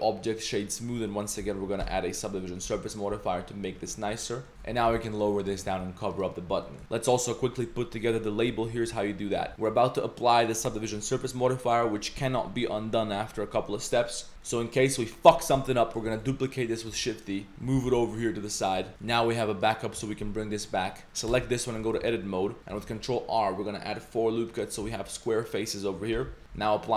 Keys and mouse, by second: 1.1 middle click, 1.9 ctrl+1, 2.7 ctrl+2, 3.1 Tab, 3.9 Tab, 4.3 middle click, 4.5-5.7 typing, 6.1 click, 6.6 middle click, 6.8 ctrl+s, 6.8 z, 9.2 middle click, 9.5 ctrl+s, 9.5 click, 9.5 z, 14.4 middle click, 16.1 shift+d, 17.2 middle click, 17.6 g, 18.9 z, 19.0 shift+middle click, 19.6 click, 20.7 click, 21.0 Tab, 21.3 Tab, 21.7 middle click, 22.0 ctrl+r, 22.8 ctrl+r, 24.9 3, 25.1 click, 25.4 click, 25.6 middle drag, 26.1 Tab.